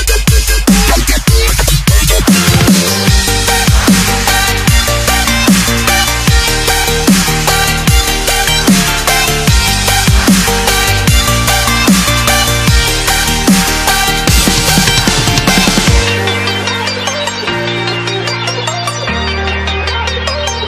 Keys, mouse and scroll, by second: 3.0 click, 9.2 click, 11.3 click, 17.7 s, 17.8 click.